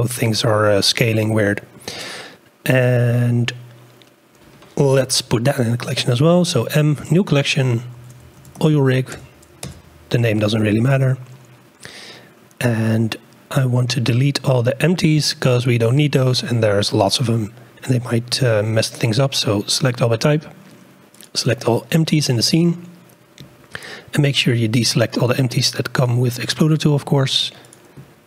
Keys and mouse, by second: 0.9-1.7 shift+drag, 2.1 click, 5.0 m, 17.1-21.3 drag, 25.2 ctrl+click, 26.0 ctrl+click, 26.7 ctrl+click.